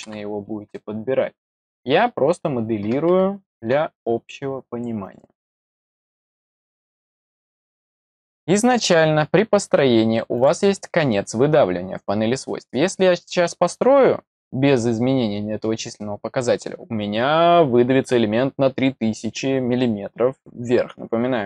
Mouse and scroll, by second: 5.0 click, 6.1 click, 10.3 click.